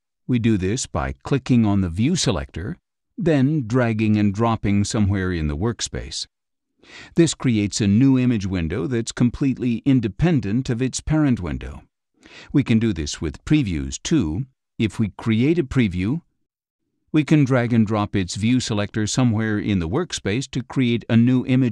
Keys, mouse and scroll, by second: 2.8-4.8 drag, 6.6-10.2 drag, 11.3-13.0 drag, 14.0 click, 15.0 click, 16.4 click, 16.8-20.1 drag.